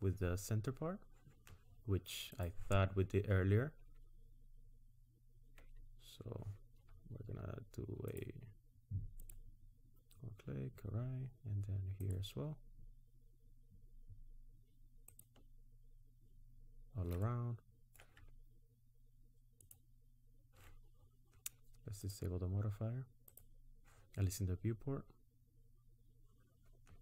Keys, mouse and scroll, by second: 2.3 click, 8.3 alt+shift+click, 17.3 middle click, 19.6 alt+shift+click, 22.0 click, 23.3 click, 24.5-25.1 scroll up 2.